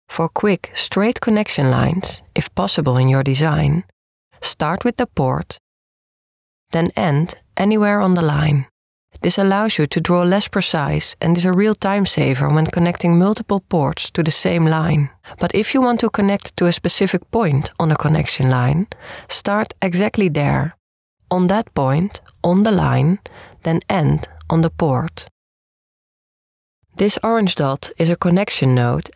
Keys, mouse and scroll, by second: 1.6 click, 7.7-9.6 right drag, 10.4 click, 11.5-13.6 right drag, 21.4-22.7 drag, 23.1 click, 23.7-24.9 drag, 25.0 click, 25.4 click, 25.6-27.6 right drag.